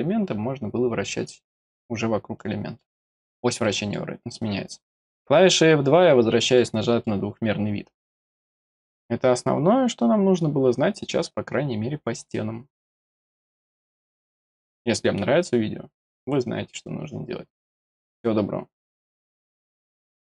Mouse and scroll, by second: 0.3-0.7 scroll down 3, 1.7 scroll down 1, 2.4 middle click, 3.6 middle click, 6.2 scroll down 1, 6.5 middle click.